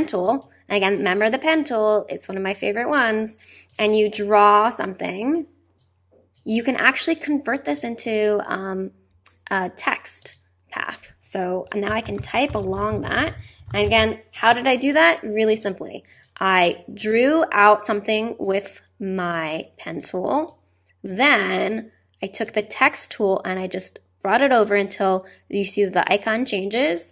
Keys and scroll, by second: 11.6-15.0 typing.